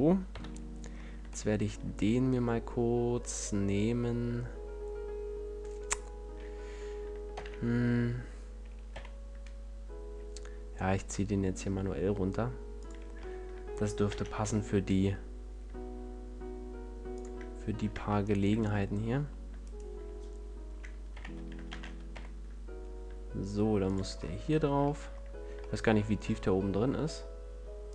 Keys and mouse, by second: 0.2 KP_1, 7.3 shift+d, 12.8-14.0 drag, 14.0 shift+d, 17.9 Tab, 17.9 click, 21.1 z, 21.6 shift+d, 23.9 click, 25.7 middle click, 27.8-27.9 drag.